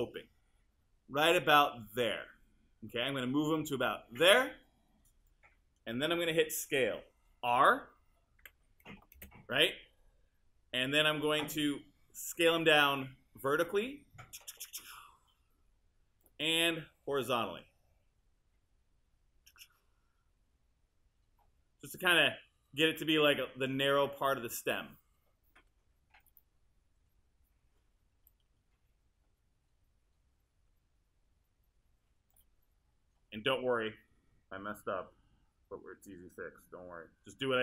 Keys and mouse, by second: 3.7-8.4 drag, 8.4 r, 9.2 space, 27.4 w.